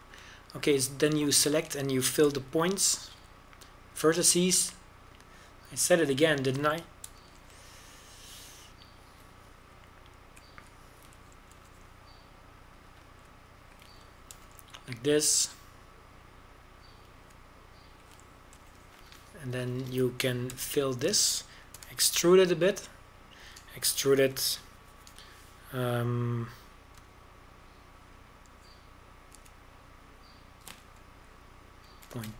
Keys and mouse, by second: 0.8 alt+f, 4.4 f, 9.1 f, 13.6 f, 16.4 f, 20.6 f, 21.4 ctrl+KP_Add, 21.7 ctrl+KP_Add, 21.8 ctrl+KP_Add, 21.9 ctrl+KP_Add, 22.7 f, 23.9 e, 29.1 z, 31.4 e.